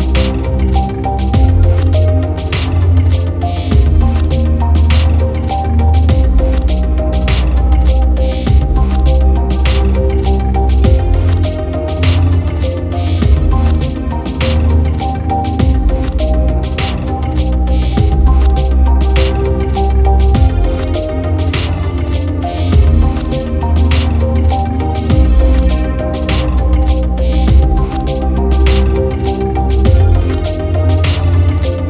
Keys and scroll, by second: 2.7 ctrl+-, 3.8 ctrl+d, 9.7 ctrl+-, 10.7 ctrl+0, 14.0 ctrl+=, 22.0 ctrl+alt+z, 26.2 ctrl+-, 27.4 ctrl+=.